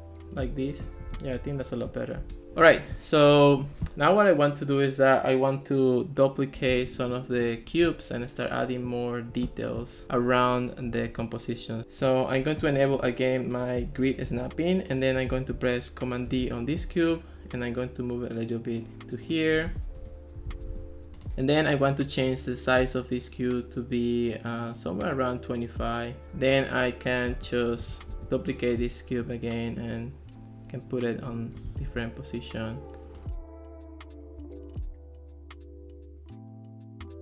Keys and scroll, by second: 2.3 Escape, 11.8 super+z, 16.4 super+d, 20.0 BackSpace, 20.5 super+z, 28.2 super+d, 31.9 super+d, 33.7 super+d, 34.0 super+d, 34.7 super+d, 35.4 super+d.